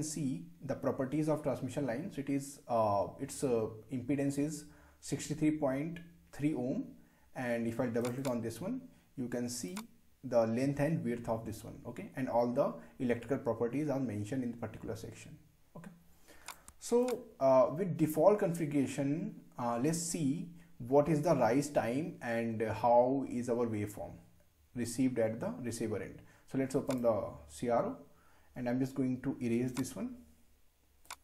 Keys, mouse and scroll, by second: 8.0 click, 16.5 click, 26.9 click, 29.7-31.2 drag.